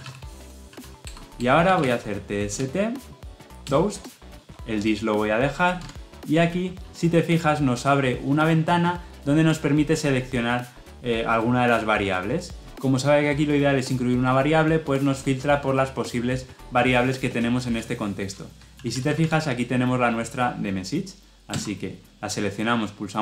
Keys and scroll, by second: 3.5 Return, 21.3 Return.